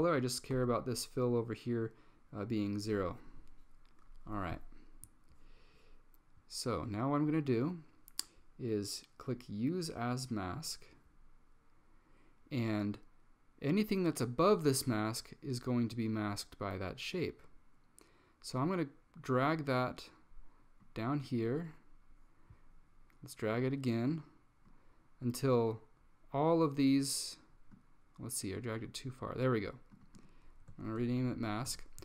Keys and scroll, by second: 0.6 Tab, 30.7-32.0 typing.